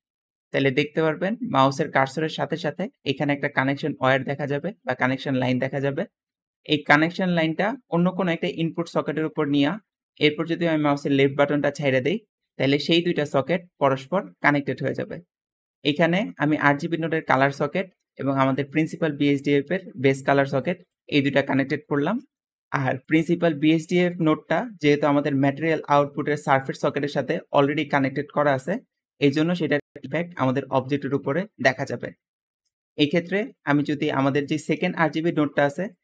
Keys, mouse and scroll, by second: 13.2 `, 15.5 Escape, 22.3 middle click, 23.3 g, 24.7 g, 25.8-26.8 drag, 27.2 click, 27.8 click, 29.4 click, 32.3 Escape, 32.7-33.3 scroll down 2, 34.4 g.